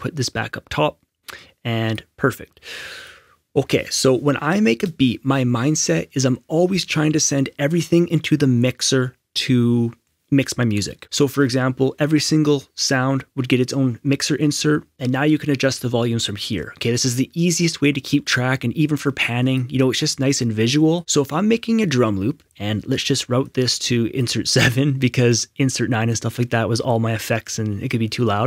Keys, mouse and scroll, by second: 0.0 click, 19.0 click, 21.0 right click, 23.4 click.